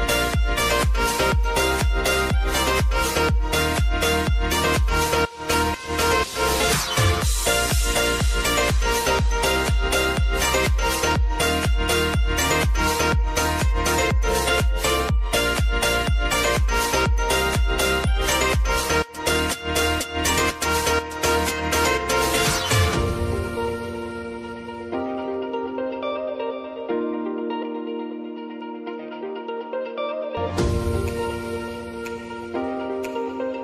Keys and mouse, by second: 0.8-7.1 drag, 7.1-9.2 drag, 9.2 space, 12.3 space, 14.4-15.9 drag, 15.9 F9, 17.1 click, 17.6 space, 18.7-21.3 drag, 21.3 space, 22.7-28.6 drag, 29.4 click, 29.6 space, 31.3 click.